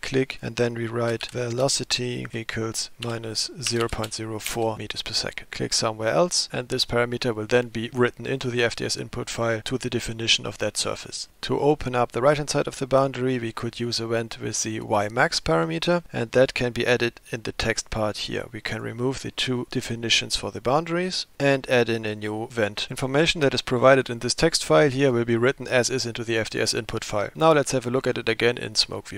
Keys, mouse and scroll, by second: 17.4-18.9 drag, 21.3 BackSpace.